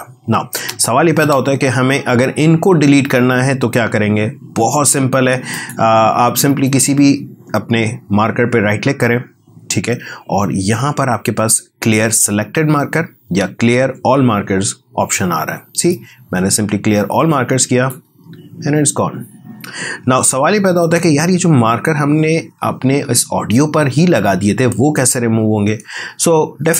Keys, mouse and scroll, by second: 1.2 space, 5.5 click, 6.5 right click, 19.9 w.